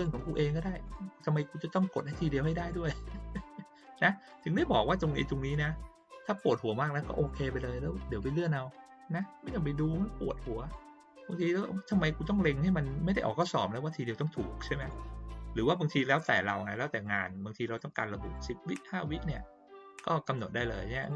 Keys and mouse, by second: 0.8-1.1 drag, 4.3 click, 5.5-6.1 drag, 14.8 click, 15.7 click, 16.1 click, 16.6 click, 17.0 click, 17.6 click, 18.2 click, 21.0 click.